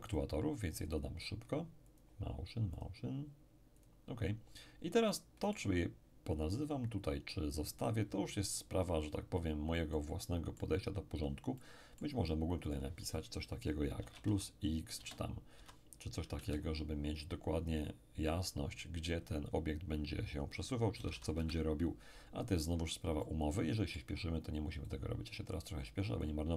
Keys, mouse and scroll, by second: 0.1-1.8 drag, 1.9-4.7 drag, 4.7-5.1 scroll down 1, 5.1-6.5 middle drag, 9.3-9.9 scroll up 1, 9.9-13.7 middle drag, 12.7 click, 14.0 =, 14.3 1, 14.9 BackSpace, 15.5 x, 16.4 Return, 18.3 click, 20.7-21.6 typing, 23.2-26.5 middle drag, 24.9-26.5 drag.